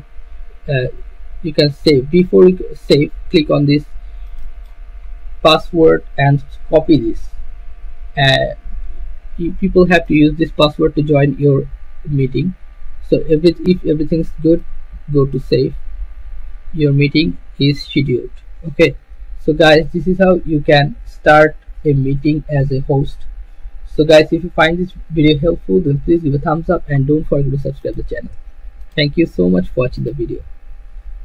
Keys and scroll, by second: 6.9 ctrl+c.